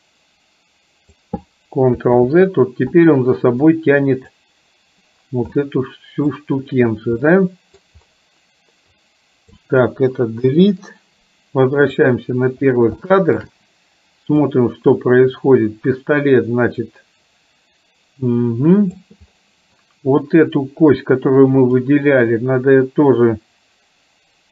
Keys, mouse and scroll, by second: 2.3 ctrl+z, 3.8-4.5 drag, 5.7 middle click, 7.4 middle click, 8.9 click, 10.5 Delete, 12.0 click, 13.0 shift+middle click, 14.5-19.0 drag, 21.8 click.